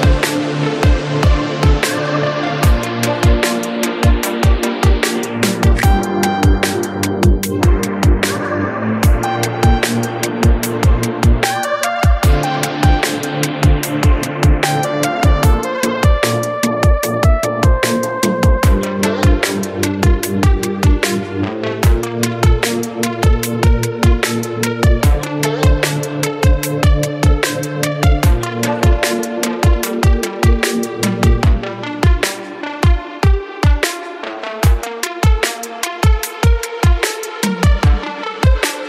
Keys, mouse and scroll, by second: 0.2 click, 0.6-0.9 scroll down 1, 0.9 g, 3.8 click, 5.2 drag, 5.8-7.3 drag, 8.2-9.9 drag, 10.2-10.8 shift+middle drag, 10.8 scroll up 2, 11.1 shift+middle click, 11.4-12.1 scroll up 1, 12.4 click, 13.0-13.4 scroll down 1, 13.4-18.4 shift+middle drag, 18.4 shift+d, 21.4 shift+d, 23.3-24.2 scroll down 2, 24.2-25.2 typing, 26.2 ctrl+z, 26.9 click, 27.3 scroll down 2, 27.6-28.3 middle drag, 28.3 click, 28.9 g, 33.5 KP_1, 34.2 g, 38.0-38.4 middle drag, 38.4-38.7 scroll up 1, 38.7-38.8 shift+middle drag.